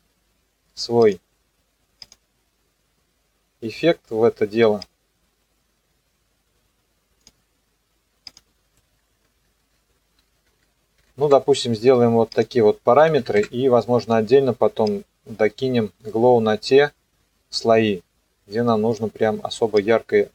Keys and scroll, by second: 11.0 KP_7, 11.3 KP_Enter, 12.9 KP_0, 13.2 KP_3, 13.4 KP_Enter.